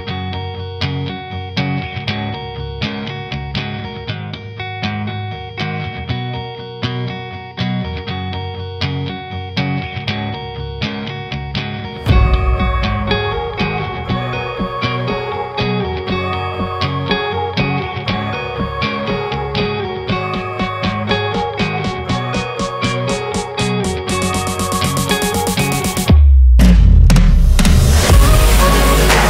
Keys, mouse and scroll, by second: 0.0 shift+click, 0.5 s, 2.1 Tab, 2.5 scroll up 1, 2.6 Tab, 2.8 1, 2.9 click, 3.2 shift+click, 3.5 g, 4.3 Tab, 5.0 ctrl+2, 5.2 scroll down 2, 5.4 Tab, 5.7 ctrl+r, 6.8 ctrl+r, 7.9 a, 8.0 scroll down 2, 8.1 middle click, 8.4 e, 9.3 Tab, 9.5 scroll down 1, 9.6 middle click, 9.9 scroll up 1, 10.1 Tab, 11.6 ctrl+r, 13.6 click, 13.8 middle click, 14.3 ctrl+click, 14.8 shift+d, 15.2 p, 15.6 middle click, 16.0 Tab, 16.2 click, 16.5 Tab, 16.7 a, 16.9 f, 17.2 Tab, 17.7 scroll down 1, 17.7 middle click, 17.9 Tab, 18.3 e, 19.4 click, 20.0-20.4 middle drag, 20.4 click, 20.9 3, 21.0 click, 21.5 click, 21.8 Tab, 22.0-22.5 middle drag, 22.5 shift+click, 22.9 KP_0, 25.5 Tab, 25.6 a, 25.8 s, 26.4 Tab, 26.8-27.7 scroll up 1, 27.7 click, 28.0 click, 28.3 click, 28.8 s.